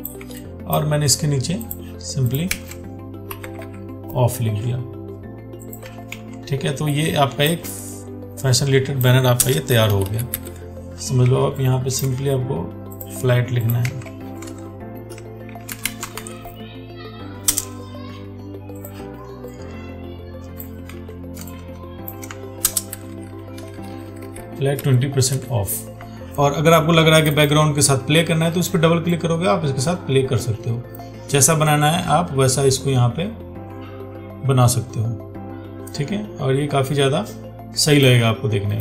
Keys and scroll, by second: 2.8 ctrl+a, 6.4 ctrl+t, 14.1 ctrl+a, 21.2 ctrl+t.